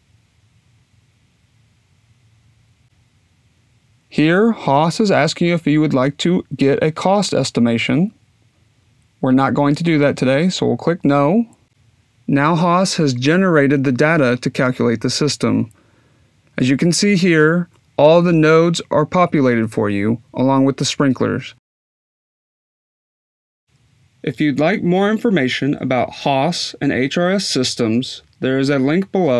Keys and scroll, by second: 0.0-0.7 typing.